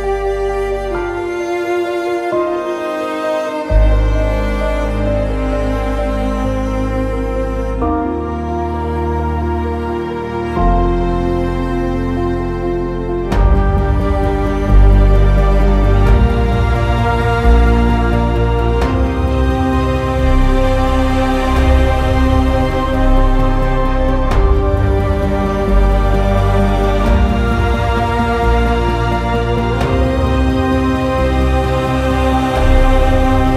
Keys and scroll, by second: 5.2 q, 18.8 ctrl+z, 29.9 Down, 30.1 Down, 30.3 Return, 31.6-32.8 typing.